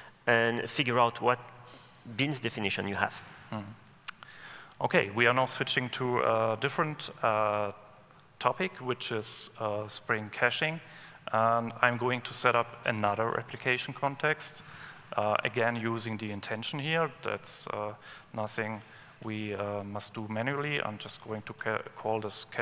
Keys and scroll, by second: 12.1 alt+Return.